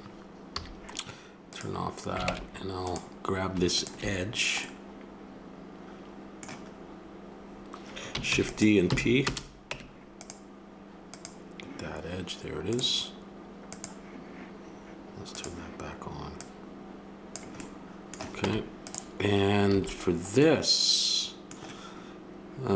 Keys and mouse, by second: 0.5 a, 1.5 click, 2.3 ctrl+Tab, 3.9 click, 4.3 click, 4.7-5.7 drag, 8.3 shift+d, 8.9 p, 9.7 Tab, 11.1-12.5 right drag, 12.5-17.6 drag, 17.6-18.1 middle drag, 18.4 Tab, 19.7 a.